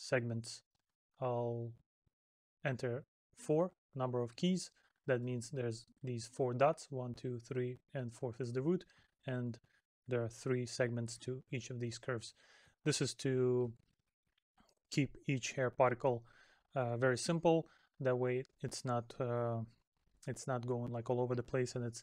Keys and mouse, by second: 5.0 middle click, 8.7 middle click, 10.9 middle click, 15.4 middle click, 18.6 middle click.